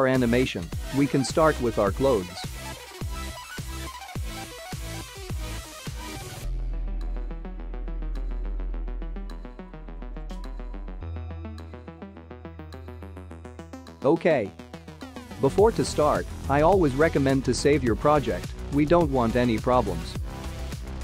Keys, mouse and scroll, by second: 4.1 click, 7.5 click, 10.5-12.2 scroll down 3, 12.2 click, 13.2-13.8 scroll up 5, 14.0 shift+middle click, 16.6 ctrl+s.